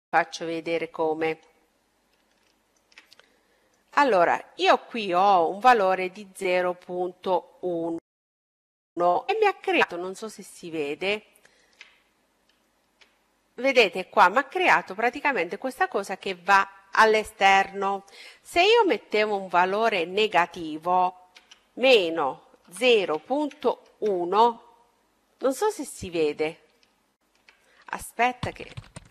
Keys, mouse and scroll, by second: 1.9-3.6 middle drag, 6.3-8.6 middle drag, 8.6-9.5 scroll up 1, 9.5-12.4 middle drag, 12.6-13.2 scroll up 1, 18.2-19.9 drag, 24.5 middle click.